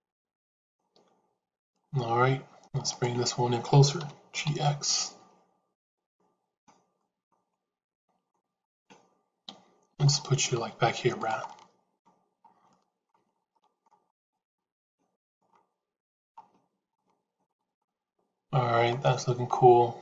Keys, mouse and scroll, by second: 1.6-2.6 shift+middle drag, 2.9 click, 3.9 g, 6.0 middle click, 6.9 middle click, 7.4 shift+middle click, 9.3 KP_7, 10.4 g, 11.3 middle click, 12.6 shift+middle click, 13.5 middle click, 14.3 g, 16.9 shift+middle click.